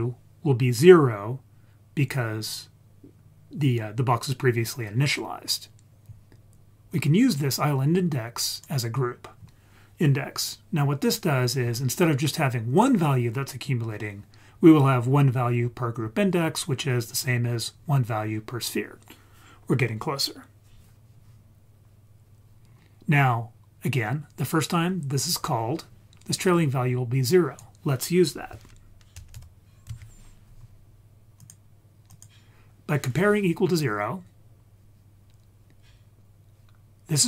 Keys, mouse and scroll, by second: 6.9-8.7 drag, 12.8 click, 22.6-24.0 scroll up 1, 24.0-25.8 scroll up 1, 26.5 click, 29.3-31.5 drag, 32.1 click, 32.9-34.6 scroll down 3.